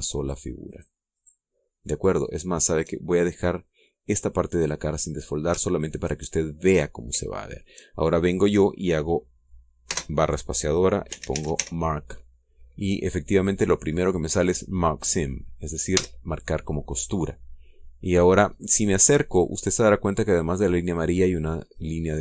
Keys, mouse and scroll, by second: 0.1 shift+right click, 0.7 shift+right click, 1.3 shift+right click, 1.7 shift+right click, 2.8 shift+right click, 3.4-3.8 shift+scroll down 1, 3.9 middle click, 5.3 scroll down 1, 5.7-6.8 middle drag, 7.0-8.4 shift+middle drag, 8.9-12.7 middle drag, 10.5 space, 11.7 m, 11.8 a, 11.9 r, 12.1 k, 16.5 Return, 18.3 scroll down 2, 19.1-19.6 scroll up 2, 19.9 scroll up 2.